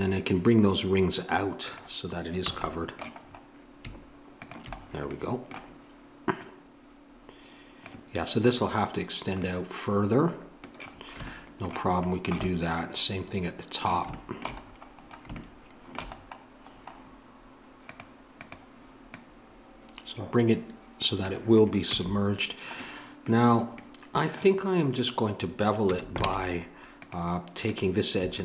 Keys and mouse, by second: 1.6-3.3 drag, 2.5 a, 4.8-8.0 middle drag, 8.0-14.6 drag, 14.6-17.8 middle drag, 17.8-21.1 drag, 21.8 a, 24.9-28.4 drag, 25.8 a, 26.2 ctrl+Tab.